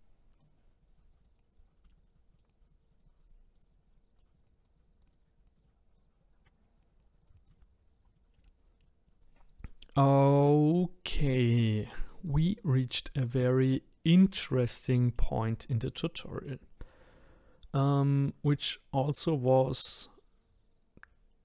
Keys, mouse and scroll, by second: 0.8 click, 1.8 shift+middle click, 1.9 click, 2.7 click, 2.9 click, 3.0 click, 3.7 click, 4.4 click, 4.8 click, 5.6 click, 6.0 click, 6.6 click, 7.0 click, 7.5 shift+middle click, 7.6-8.0 scroll up 2, 8.0 scroll down 3, 8.1-9.2 shift+middle drag, 13.3-18.9 middle drag.